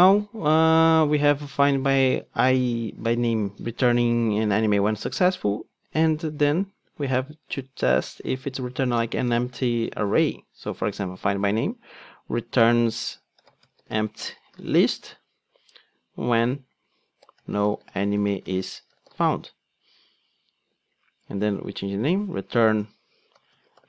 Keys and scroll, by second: 6.8 super+c, 9.2 super+v.